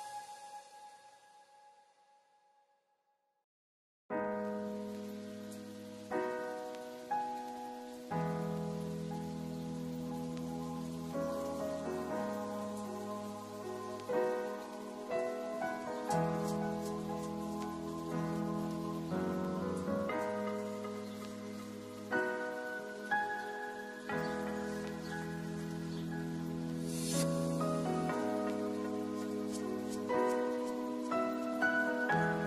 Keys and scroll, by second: 10.3 a, 12.1 a, 16.3 a, 22.5 ctrl+s.